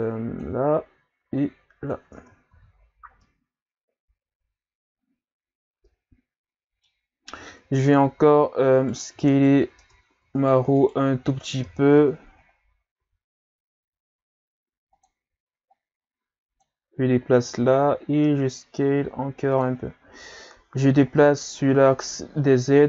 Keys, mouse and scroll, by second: 1.4 click, 2.2 Tab, 2.5 a, 2.7-3.2 scroll down 3, 3.2-6.2 middle drag, 7.0-7.4 scroll up 1, 7.4 Tab, 8.1 s, 9.4 shift+right click, 9.8 Tab, 10.4 shift+right click, 10.8 shift+right click, 11.6 KP_3, 12.0 Tab, 13.0 s, 15.7 click, 17.7 s, 20.3-20.7 scroll up 2, 21.0-22.0 scroll down 4, 22.0-22.8 scroll down 1.